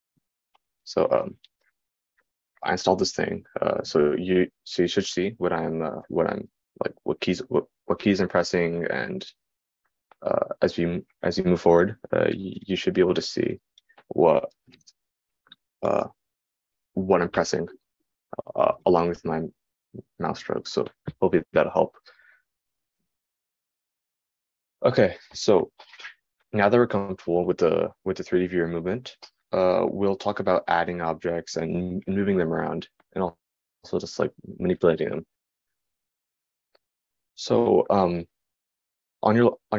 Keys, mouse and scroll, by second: 4.4-23.5 middle drag, 23.5-25.5 right drag, 25.5-39.7 drag.